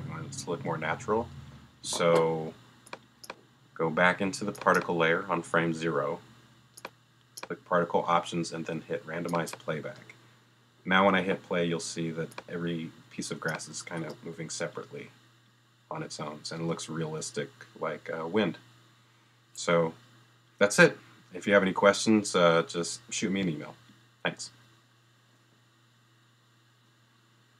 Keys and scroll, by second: 1.8 space, 14.0 space.